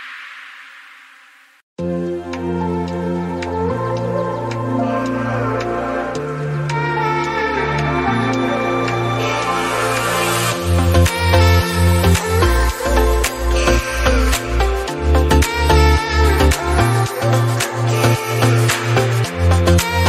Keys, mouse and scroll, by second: 0.0 scroll up 1, 0.1 middle click, 0.7-1.2 scroll down 3, 1.5 middle click, 7.1-8.5 right drag, 8.5 click, 8.9 scroll up 6, 9.1-11.0 middle drag, 11.0 click, 11.4 n, 12.4 click, 16.2-17.2 drag, 17.5 middle click, 17.8 scroll up 3, 18.0-19.7 middle drag, 19.7 click.